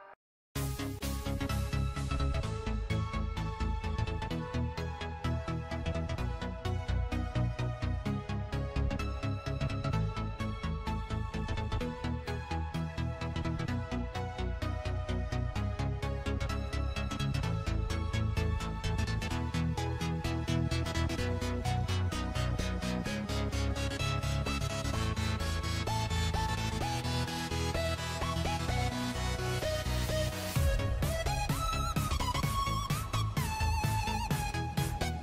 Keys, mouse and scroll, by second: 3.6 click, 4.8 click, 9.6 click, 12.1 click, 15.2 click, 16.3-17.2 scroll, 18.0 click, 18.9 click, 20.4-25.8 drag.